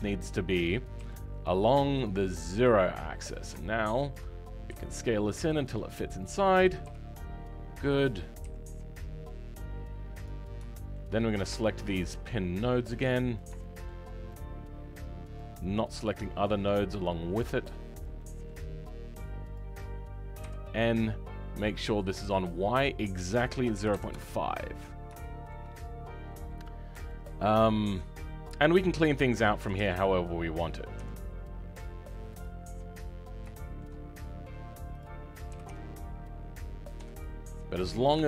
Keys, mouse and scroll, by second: 16.1 shift+click, 18.0 shift+click, 20.4 n.